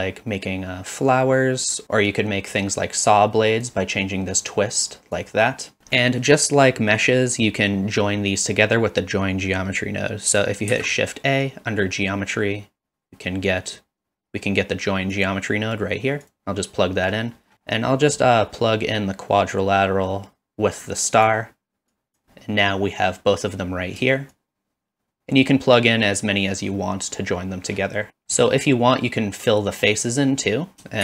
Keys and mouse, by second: 2.2-3.7 drag, 4.5 click, 5.8 ctrl+z, 6.1 middle click, 8.5 middle click, 10.7 shift+a, 17.5 middle click, 18.2 middle click, 19.6-21.3 drag, 21.9 click, 24.5 shift+click, 28.1 ctrl+s.